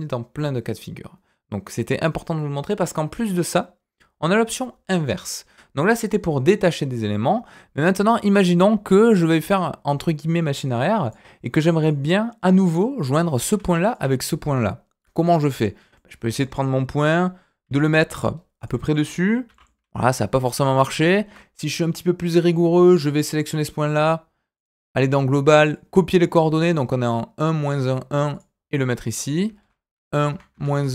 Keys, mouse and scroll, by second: 7.8 click, 8.2 middle click, 8.5-11.0 scroll up 2, 11.0 click, 11.8 click, 13.8 shift+click, 15.5 click, 15.9 middle click, 17.6 g, 19.4 g, 20.6 ctrl+z, 21.0 ctrl+z, 22.8 click, 24.5 click, 25.6-26.6 drag, 28.3 click, 29.0-30.9 drag.